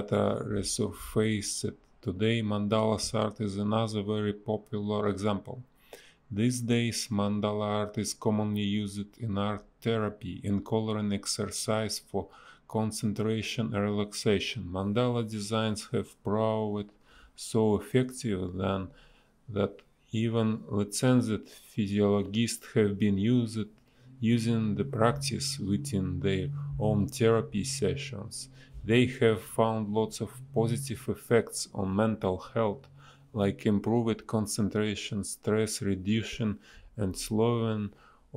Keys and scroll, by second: 2.7 space, 3.2 ctrl+z, 3.3 space, 6.1 ctrl+z, 9.1 ctrl+z, 12.7 space, 13.0 a, 14.3 space, 15.3 b, 15.7 a, 16.1 space, 18.4 space, 22.5 space, 24.2 shift+e, 26.1 ctrl+z, 26.3 ctrl+z, 28.3 a, 29.9 space, 31.0 Delete, 31.4 space, 34.9 space, 35.5 b, 35.9 space.